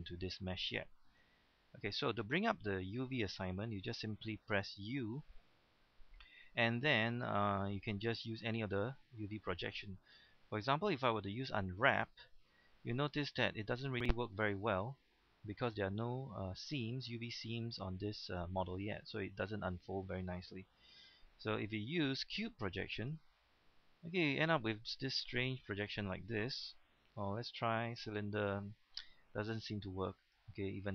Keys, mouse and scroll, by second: 2.0-3.3 middle drag, 5.0 u, 11.8 click, 13.1 middle click, 13.8-14.5 scroll up 1, 14.5-15.0 scroll up 1, 16.5-17.6 scroll up 1, 21.6 u, 23.0 click, 23.7 scroll down 1, 27.0 u, 27.9 click, 29.6 u, 30.3 click.